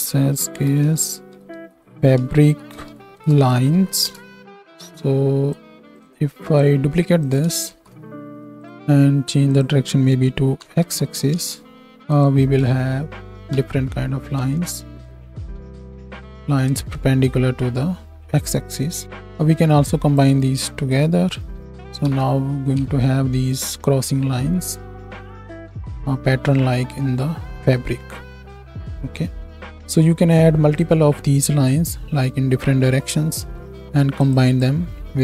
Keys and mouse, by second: 7.3 right click, 7.3-13.3 ctrl+shift+drag, 7.7 ctrl+shift+d, 9.5-12.2 middle drag, 9.5-12.2 right drag, 11.0 Tab, 12.7 shift+Up, 12.9 shift+Down, 13.5 shift+Right, 13.5 shift+Left, 14.5 space, 14.8-32.7 drag, 19.0 space, 20.9-32.7 middle drag, 20.9-32.7 right drag, 22.0 shift+Right, 22.1 shift+Left, 22.8 space, 29.9 space, 34.0 click, 34.0 middle click, 34.0 right click.